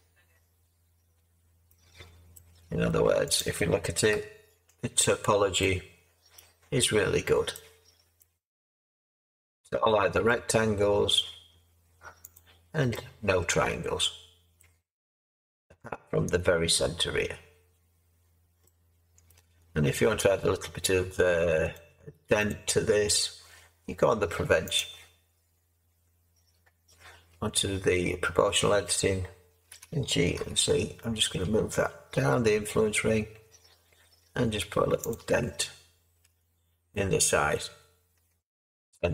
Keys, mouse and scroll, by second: 4.1 Tab, 29.7 Tab, 29.7 g, 30.3 z, 36.2 Tab.